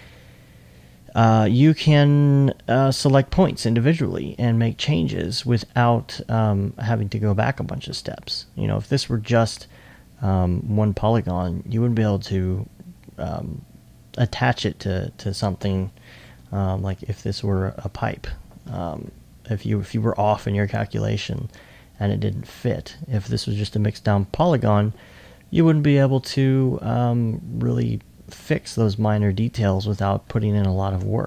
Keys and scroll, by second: 16.3 alt+1.